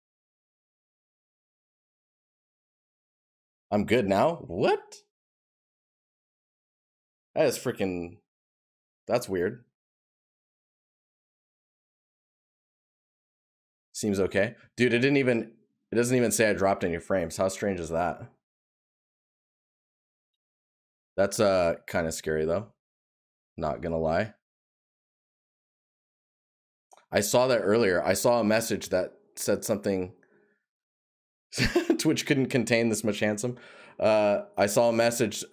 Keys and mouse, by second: 18.1 right click.